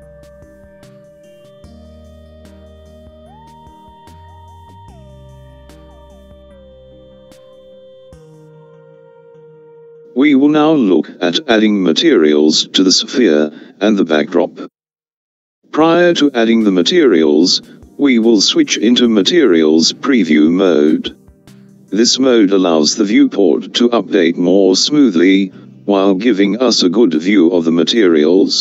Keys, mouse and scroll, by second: 0.8-2.4 scroll down 1, 4.1 click.